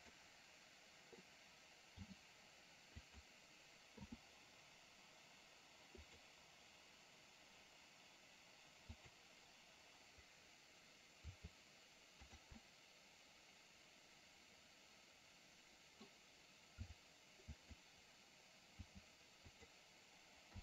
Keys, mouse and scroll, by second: 2.0 g, 4.0 i, 6.2 click, 9.0 click, 11.3 r, 12.7-16.1 middle drag, 16.9 r, 19.0 g.